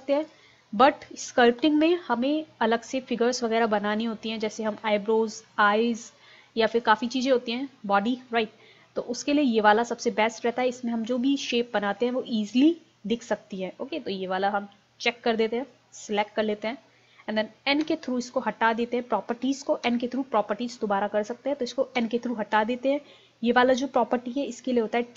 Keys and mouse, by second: 15.7-17.5 drag, 17.8 n, 19.9 n, 22.0 n.